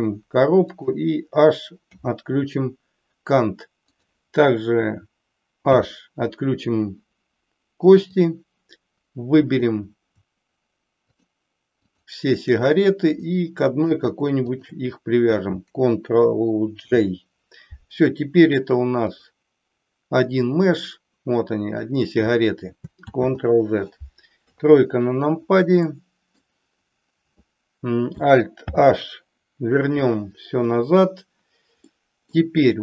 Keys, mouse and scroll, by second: 1.9 h, 3.9 click, 5.7 h, 8.0-9.7 drag, 11.0 shift+click, 11.9 shift+click, 13.1-14.0 middle drag, 14.5 shift+click, 16.8 ctrl+j, 19.1 click, 20.4-21.9 drag, 23.0 ctrl+z, 24.4 KP_3, 25.9-26.4 middle drag, 28.7 alt+h, 31.9 middle click.